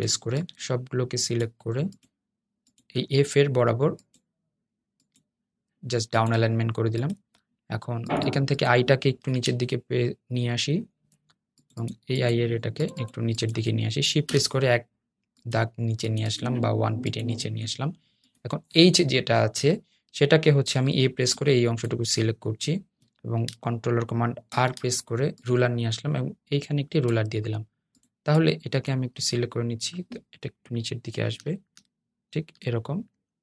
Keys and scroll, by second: 13.4 Down, 19.5 Down, 29.9 Down.